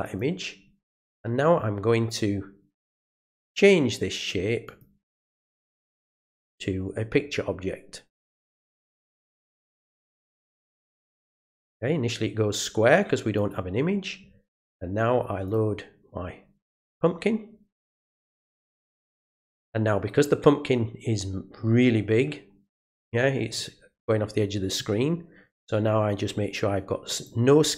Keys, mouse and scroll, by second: 0.0 click, 4.6 click, 10.6 click, 13.3 click, 15.4 click, 16.8 click, 18.1 click, 27.1 click.